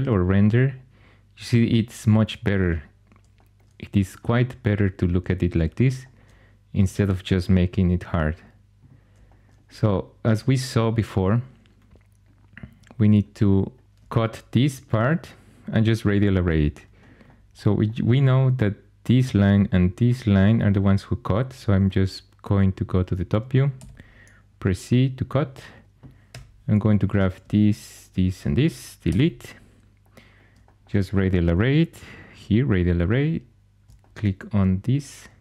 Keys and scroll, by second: 13.8 shift+super+e, 23.6 c, 26.2 4, 29.0 x.